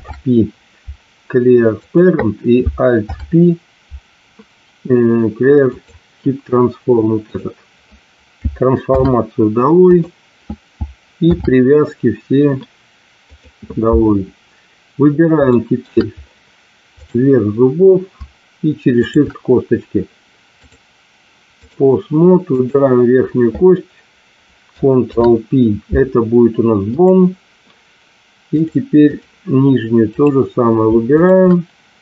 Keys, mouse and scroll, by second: 2.9 alt+p, 7.2 click, 8.8 alt+p, 11.2 alt+p, 15.5 shift+middle drag, 18.9 shift+click, 20.7-22.0 drag, 22.4-23.0 drag, 24.9 ctrl+p, 28.5-29.6 drag, 30.0 click.